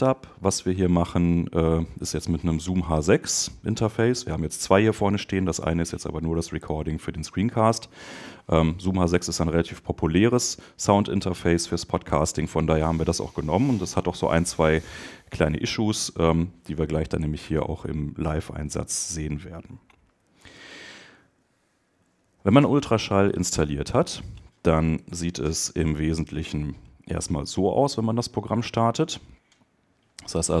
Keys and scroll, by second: 20.5 super+Tab, 24.9 super+BackSpace.